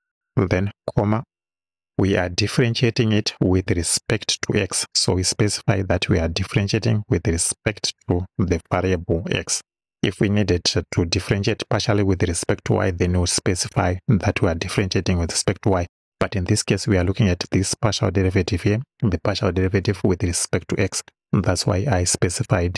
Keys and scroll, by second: 0.8 ,, 7.6 x.